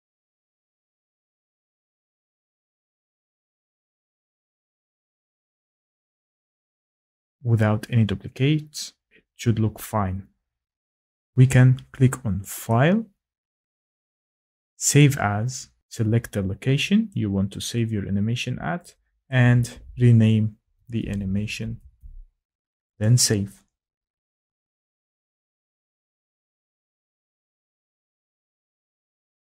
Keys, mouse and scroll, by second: 3.4 click, 4.0 click, 11.3 click, 12.7 click, 15.0 click, 15.7 scroll, 17.0 click, 19.2 click, 20.3-22.4 typing, 24.7 click.